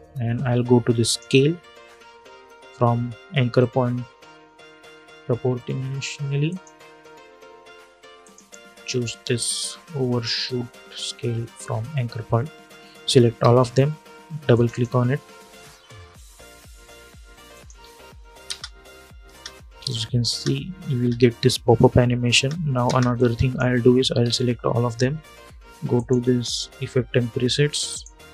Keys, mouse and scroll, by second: 0.7 click, 6.2 click, 12.6 click, 13.1 ctrl+a, 14.2 click, 16.4-18.2 typing, 17.2 click, 19.6 click, 20.0 space, 22.9 click, 23.9 ctrl+a, 25.7 click.